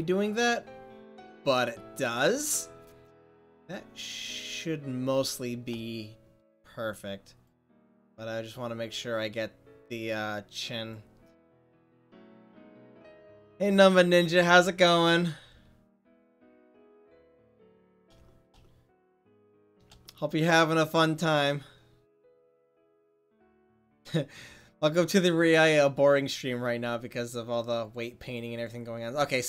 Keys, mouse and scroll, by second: 5.4 click, 6.0-7.6 middle drag, 7.6-12.9 right drag, 17.1 middle click, 28.6 click, 29.2-29.4 middle drag.